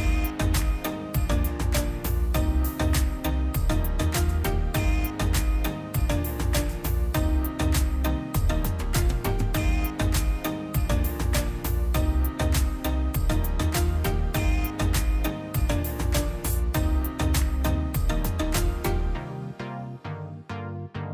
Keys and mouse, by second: 0.0 click, 0.2 drag, 0.7 middle click, 0.9 click, 1.3-2.0 middle drag, 2.0 click, 2.5 middle click, 2.9-3.4 drag, 3.7 ctrl+shift+click, 4.2 middle click, 5.1-5.9 drag, 6.1-6.9 drag, 7.2-8.0 drag, 8.8-9.4 middle drag, 9.4-10.1 drag, 10.2 middle click, 10.5-10.9 middle drag, 10.9-12.9 drag, 13.1-14.6 drag, 15.0-15.4 drag, 19.7-20.4 drag, 20.9-21.1 drag.